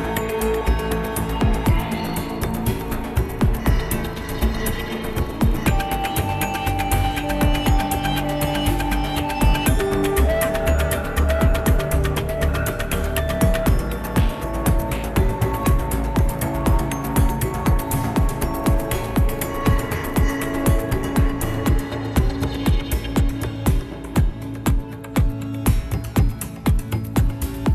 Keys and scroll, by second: 5.8 ctrl+s, 7.8 ctrl+s, 20.8 ctrl+alt+shift+b.